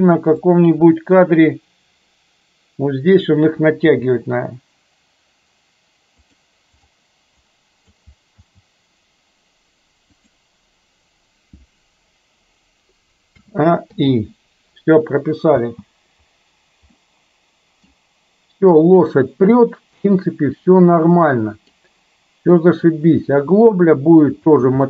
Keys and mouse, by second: 0.6 click, 4.1 g, 7.4 click, 8.4 g, 13.4 a, 13.9 i, 15.7 space, 16.9-17.9 middle drag, 20.1-21.8 middle drag, 22.6 middle click, 24.6 space.